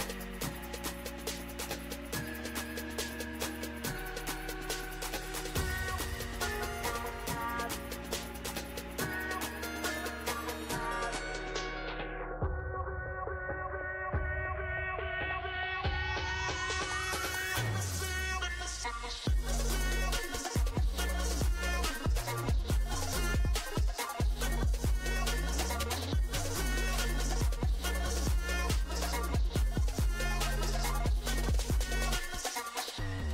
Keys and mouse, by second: 2.3 f, 4.2 click, 8.1-11.9 drag, 13.0-16.0 drag, 27.3 f, 28.9-30.5 drag, 31.3 ctrl+z.